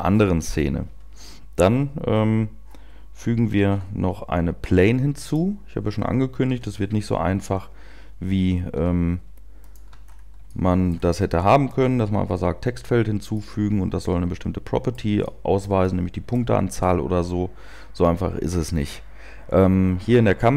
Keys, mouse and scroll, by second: 4.0 shift+a, 6.4 KP_7, 7.3-8.0 scroll down 4, 8.7 g, 9.9 click, 9.9-10.4 shift+scroll up 3, 10.4 shift+middle click, 11.2-11.9 scroll up 1, 11.9 scroll up 1, 13.3 middle click, 15.2 shift+middle click, 15.6 shift+scroll up 1, 15.8 middle click.